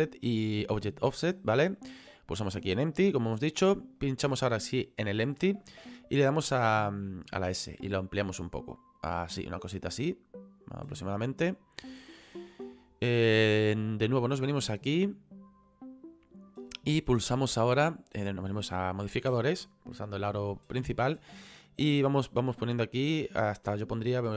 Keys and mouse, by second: 2.1 click, 4.0 right click, 7.3 s, 11.1 click, 13.8 right click, 15.6 click, 22.0 click, 24.3 KP_2.